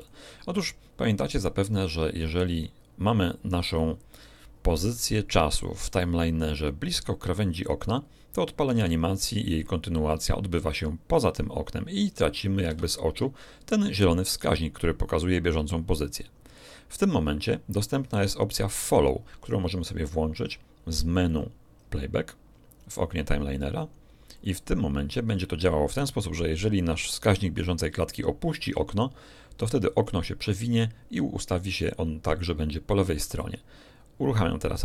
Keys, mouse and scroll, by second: 2.3 click, 8.7 alt+a, 12.6 Escape, 21.3 click, 24.3 click.